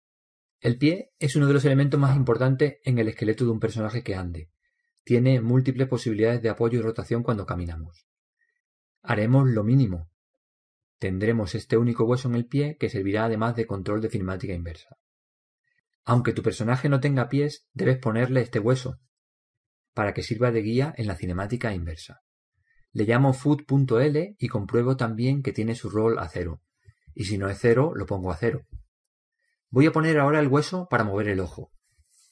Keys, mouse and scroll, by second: 2.0-3.7 right drag, 24.8 click, 26.0 o, 28.9 click.